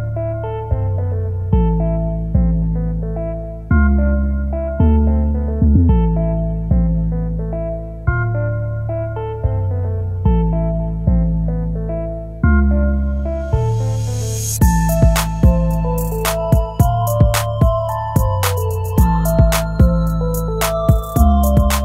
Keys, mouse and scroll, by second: 3.1 scroll down 1, 4.2 space, 8.3 scroll up 1, 18.9 scroll down 1, 21.7 space.